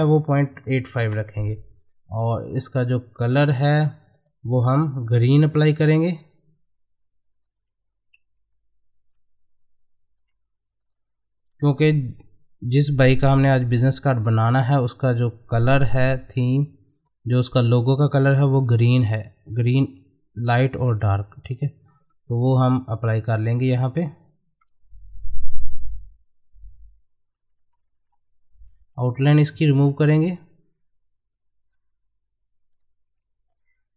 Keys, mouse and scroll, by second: 2.5 click, 5.1 g, 6.2-10.8 ctrl+drag, 14.4 click, 16.4-18.3 drag, 23.6 click, 28.0 space, 31.3-32.7 drag, 32.7 right click.